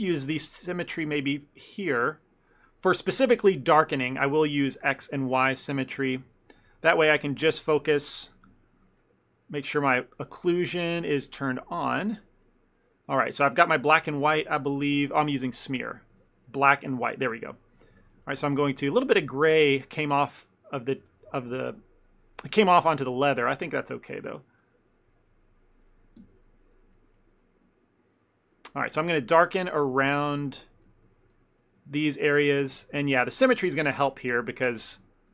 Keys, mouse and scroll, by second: 1.4 middle click, 2.9 middle click, 4.4 click, 4.9 click, 5.5 ctrl+middle click, 5.6 ctrl+middle click, 5.9 f, 6.2 shift+middle click, 6.4 ctrl+middle click, 6.7 middle click, 7.3 ctrl+middle click, 7.6 middle click, 7.8 shift+middle click, 8.2 shift+middle click, 8.4 shift+middle click, 8.9 shift+middle click, 9.7 middle click, 10.4 click, 12.5 middle click, 12.9 middle click, 13.9 middle click, 14.5 middle click, 14.9 middle click, 15.9 click, 16.7 middle click, 17.6 shift+middle click, 18.0 f, 18.3 ctrl+middle click, 18.9 ctrl+middle click, 19.0 shift+middle click, 19.3 shift+middle click, 20.1 ctrl+click, 20.3 ctrl+click, 21.1 f, 21.4 shift+middle click, 21.7 ctrl+middle click, 22.5 f, 23.2 ctrl+click, 23.7 ctrl+click, 23.9 ctrl+click, 24.0 ctrl+click, 24.2 ctrl+click, 24.7 ctrl+click, 24.9 ctrl+click, 25.3 middle click, 26.3 KP_Decimal, 27.0 ctrl+middle click, 27.2 middle click, 27.5 middle click, 27.9 middle click, 28.3 middle click, 28.5 middle click, 28.9 shift+middle click, 29.0 shift+middle click, 29.1 ctrl+middle click, 29.4 f, 29.7 click, 29.9 click, 30.6 ctrl+z, 30.8 ctrl+z, 30.9 ctrl+click, 31.1 ctrl+click, 31.5 click, 31.7 middle click, 32.4 ctrl+click, 32.7 f, 33.1 ctrl+click, 33.3 ctrl+click, 33.5 ctrl+click, 33.7 ctrl+click, 34.0 ctrl+click, 34.4 ctrl+click, 34.8 middle click.